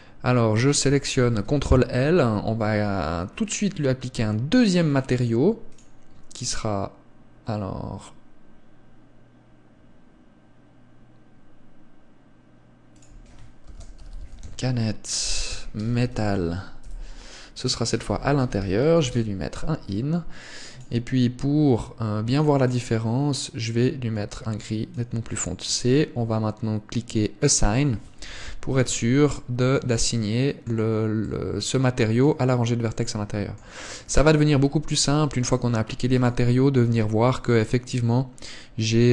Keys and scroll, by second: 1.6 ctrl+l, 28.5 z, 29.2 Tab, 34.8 Tab.